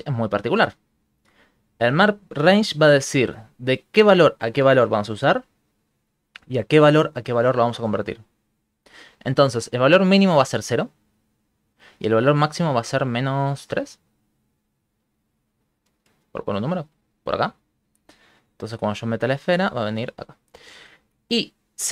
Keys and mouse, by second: 0.5 ctrl+middle click, 1.1 ctrl+middle click, 2.1 shift+middle click, 2.3 shift+middle click, 2.6 ctrl+middle click, 13.9 click, 18.1 right click, 18.9 g.